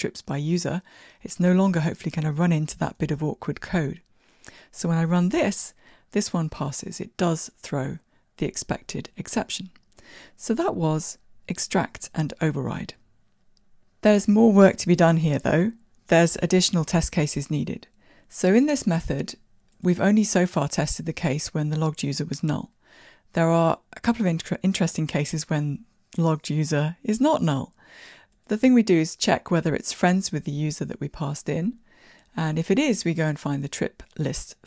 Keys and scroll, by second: 3.2 ctrl+r, 3.2 shift+F10.